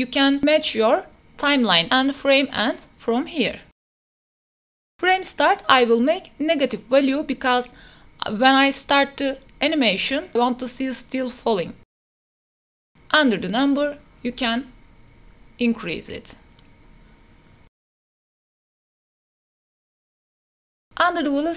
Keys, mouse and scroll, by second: 0.2 KP_0, 3.0-3.8 drag, 5.5-6.5 drag, 6.3 KP_0, 7.6-9.3 drag, 11.4 space, 13.9 space, 14.4 click, 15.4-16.8 drag, 16.4 KP_0, 17.6 space, 18.7 click, 20.2 ctrl+s, 20.2 space.